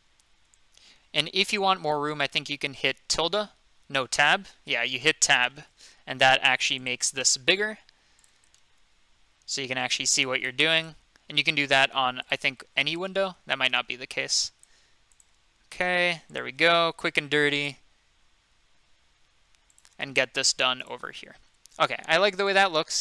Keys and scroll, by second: 4.0 Tab, 13.4 ctrl+z, 13.7 ctrl+z.